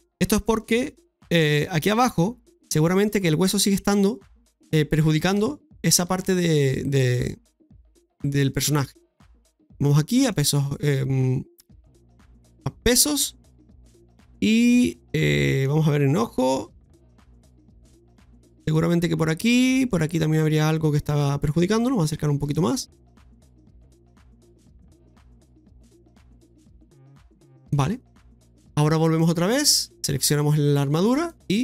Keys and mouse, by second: 1.2 alt+r, 2.4 shift+middle click, 3.4 middle click, 4.5 right click, 5.4 Tab, 5.9 Tab, 6.3 right click, 7.3-8.4 drag, 8.4 right click, 9.7 click, 11.8-12.8 drag, 13.0-15.5 middle drag, 16.4 middle click, 17.1-18.8 drag, 18.8 middle click, 19.9-21.6 drag, 21.7 middle click, 22.5 shift+middle click, 23.0 middle click, 23.7 shift+middle click, 24.5-25.7 middle drag, 26.3-27.7 drag, 28.7 click, 30.4 right click, 31.3 click.